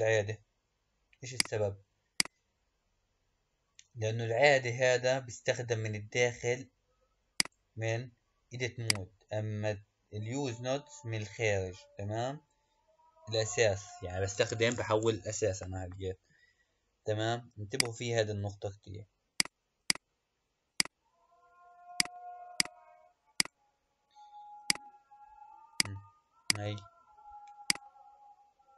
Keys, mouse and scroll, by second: 1.2 click, 7.3 click, 17.7 click, 19.3 click, 19.9 click, 20.9 click, 21.9 click, 23.5 click, 24.6 click.